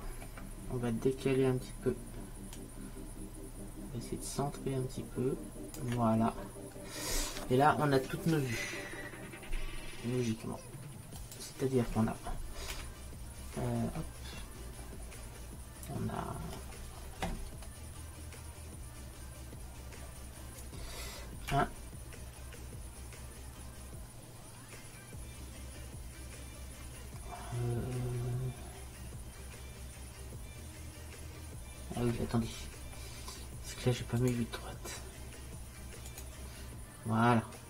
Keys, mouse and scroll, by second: 2.7-4.5 drag, 6.4-9.5 middle drag, 11.3-12.8 drag, 34.3-36.2 drag.